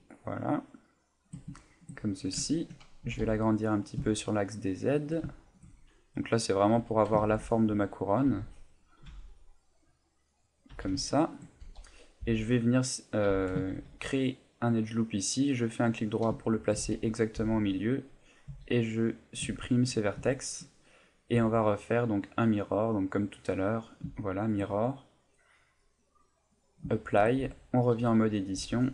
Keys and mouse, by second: 1.2 shift+click, 1.6 shift+middle click, 2.4 ctrl+middle click, 3.0 s, 5.0 shift+click, 5.3 shift+middle click, 6.7 a, 7.2 ctrl+Tab, 8.3 b, 9.1 g, 10.6 click, 10.7 a, 11.0 shift+middle click, 12.2 b, 13.3 a, 13.7 ctrl+r, 15.8 right click, 16.4 shift+middle click, 16.8 a, 17.4 b, 19.6 shift+middle click, 20.3 shift+middle click, 21.3 Tab, 22.3 click, 24.1 shift+middle click, 26.2 click, 26.9 shift+middle click, 27.4 Tab, 28.6 b.